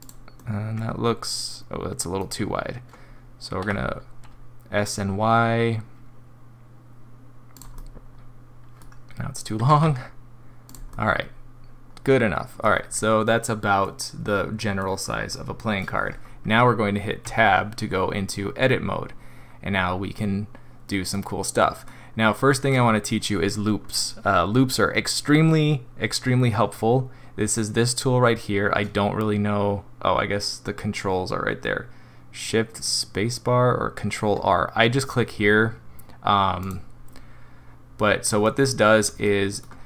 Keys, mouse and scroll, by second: 0.4 middle click, 0.7 middle click, 1.7 middle click, 2.3 scroll up 3, 3.6 s, 7.8 middle click, 9.6 s, 10.9 middle click, 11.5 middle click, 11.8 middle click, 12.8 scroll up 2, 13.9 middle click, 14.5 middle click, 14.7 middle click, 14.8 middle click, 14.8-15.2 scroll down 2, 15.3 middle click, 17.3 Tab, 20.2 middle click, 21.6 middle click, 22.1-22.7 scroll up 1, 22.7 middle click, 23.3 middle click, 36.6 click, 38.5 middle click, 39.3 middle click.